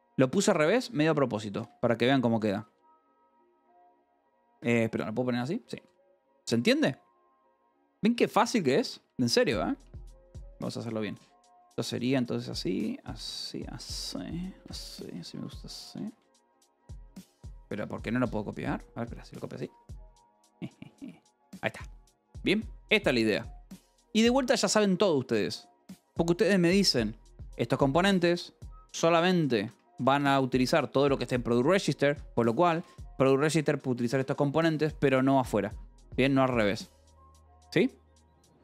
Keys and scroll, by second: 0.0-1.7 typing, 3.4 ctrl+g, 4.4 Escape, 4.9-9.2 typing, 12.2-22.0 typing, 14.5 Escape, 16.3 Escape, 21.4 Escape, 27.2 j, 27.7 k, 28.2 j, 29.6 Escape, 29.8 k, 31.1 shift+v, 32.0 Escape, 32.3-35.2 typing, 35.3 Escape.